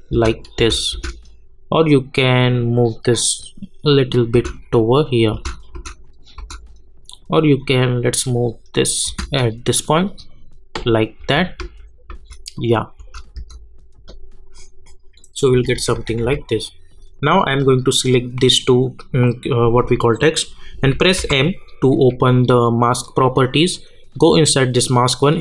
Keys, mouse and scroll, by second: 1.9-4.3 drag, 4.3 space, 7.1 click, 9.1 space, 11.2 space, 12.5 click, 13.0 space, 15.7-16.2 typing, 17.1 click, 17.9 shift+click, 21.2 m, 23.7 click.